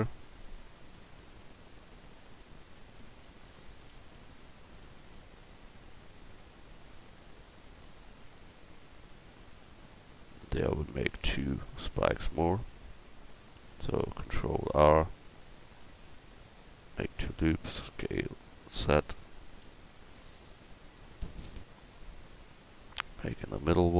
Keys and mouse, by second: 1.2 s, 2.2 click, 3.2 KP_1, 7.4 s, 9.6-11.1 drag, 11.1 Tab, 11.9 Tab, 13.9 ctrl+r, 17.2 s, 22.3-23.9 drag.